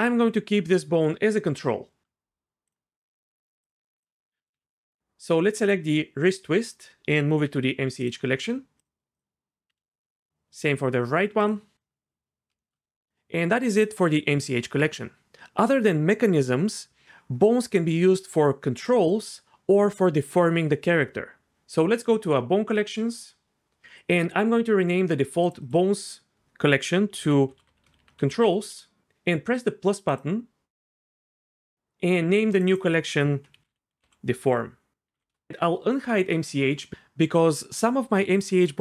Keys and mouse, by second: 2.7-4.1 right drag, 4.4 ctrl+z, 4.5 ctrl+z, 7.4 m, 9.7 m, 22.8 click, 25.6-28.7 drag, 30.1 click, 32.5 click, 32.7-35.3 drag, 36.3 click.